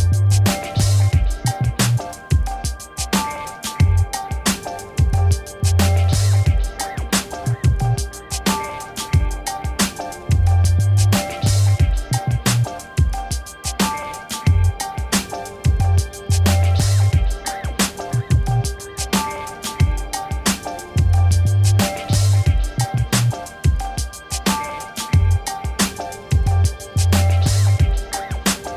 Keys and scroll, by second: 7.9-10.3 typing.